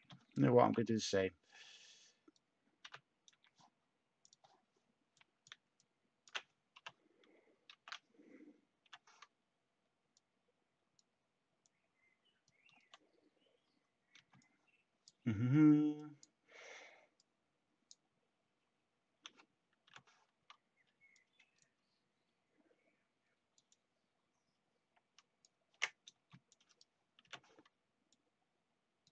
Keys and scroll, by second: 0.0-1.1 typing, 2.8 c, 6.7-8.8 typing, 19.8 h, 26.1 t.